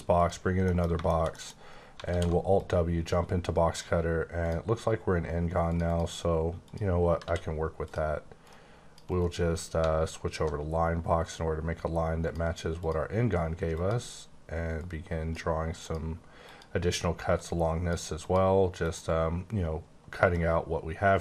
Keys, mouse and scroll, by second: 0.1 click, 0.6 middle click, 0.7 scroll down 1, 1.0 shift+scroll up 1, 1.1 shift+middle click, 1.5-1.9 scroll up 2, 2.0 alt+w, 2.5 click, 4.4 click, 5.7 click, 5.8 double click, 6.6 click, 7.2 d, 7.8 click, 8.3 click, 9.1 right click, 9.9-10.5 alt+scroll up 1, 10.5-11.2 scroll up 1, 11.2 click, 12.8 click, 13.7 click, 14.7 click, 15.8 click, 16.3 click, 17.3 click, 18.2 click, 20.3 click.